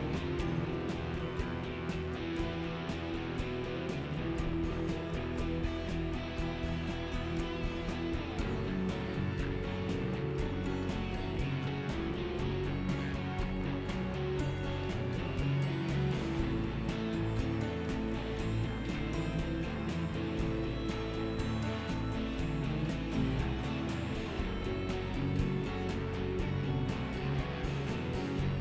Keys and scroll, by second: 5.6 ctrl+z.